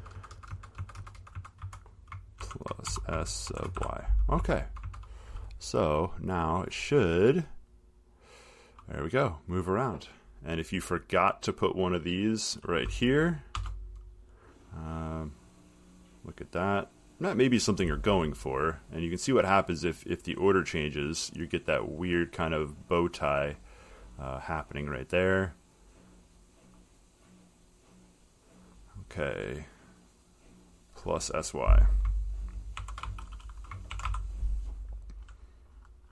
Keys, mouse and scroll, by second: 3.1-4.5 typing, 4.6 Right, 4.9 Right, 5.1 Right, 6.5 click, 10.3 click, 12.8 click, 13.8 BackSpace, 21.9 click, 22.4 middle click, 28.9 click, 31.0 click, 33.3-34.7 typing, 35.6 middle click.